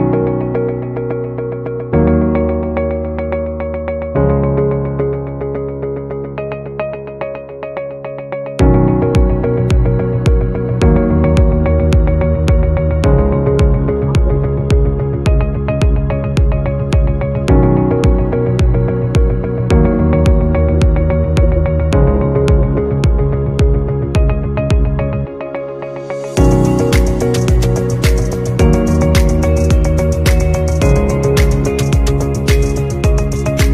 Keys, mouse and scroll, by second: 0.2 shift+click, 2.5 alt+scroll down 1, 4.3 alt+scroll up 1, 4.9 alt+scroll up 1, 13.9-15.1 typing, 19.1-24.3 typing, 24.3 shift+click, 30.7 scroll down 2, 31.7 double click.